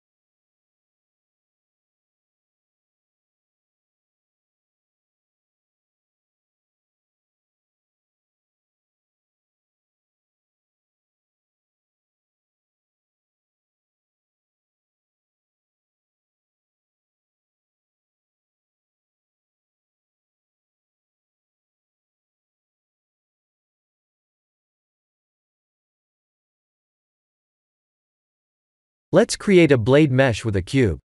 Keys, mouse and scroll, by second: 1.2 click, 2.7 click, 3.5 click, 3.7 x, 4.6-5.1 scroll up 2, 5.0 middle click, 5.1 middle click, 7.1 middle click, 7.8-9.1 scroll down 2, 9.1-9.8 scroll up 4, 9.8 Tab, 10.3 click, 10.6 Tab, 11.0 3, 13.7-14.4 middle click, 14.1 middle click, 14.2 middle click, 14.3 middle click, 14.7 middle click, 15.1 middle click, 15.2 middle click, 16.4-17.1 scroll down 3, 17.1 middle click, 19.3 Tab, 20.2-21.5 scroll down 1, 25.3 click, 26.2 click, 26.7 click, 27.2 click, 28.3 KP_1, 28.6 KP_7, 29.4 click, 29.7 shift+a.